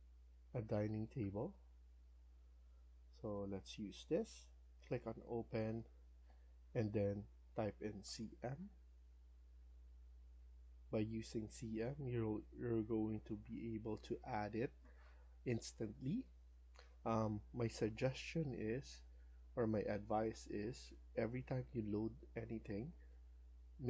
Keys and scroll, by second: 0.5 Down, 1.1 Down, 7.8-8.9 typing.